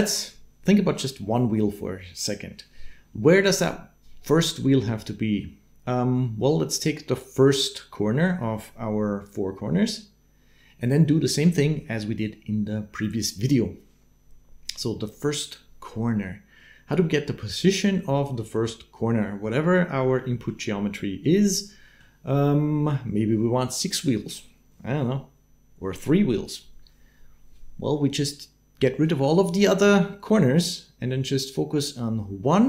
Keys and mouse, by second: 20.1 middle click, 21.1 middle click.